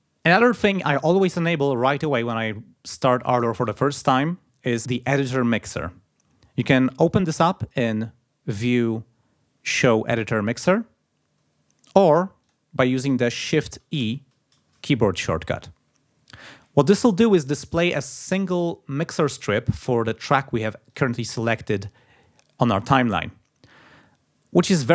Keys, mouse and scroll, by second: 8.5 click, 12.4 click, 14.0 shift+e, 20.9 click.